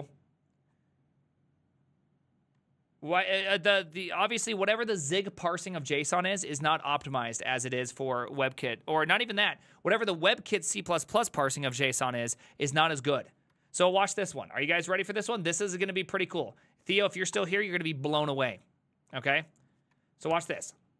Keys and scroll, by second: 3.4 Up, 4.2 space, 4.5 shift+7, 6.1 alt++, 13.6 alt+{, 17.4 Return, 20.4 Return, 20.4 ctrl+c.